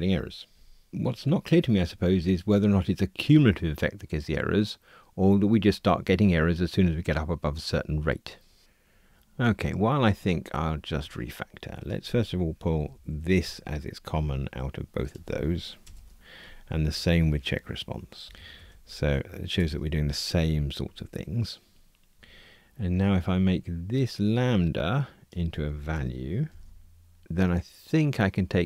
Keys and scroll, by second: 12.8 alt+shift+Up, 15.8 super+BackSpace, 16.8 alt+shift+Up, 19.5 super+BackSpace, 26.5 alt+super+v.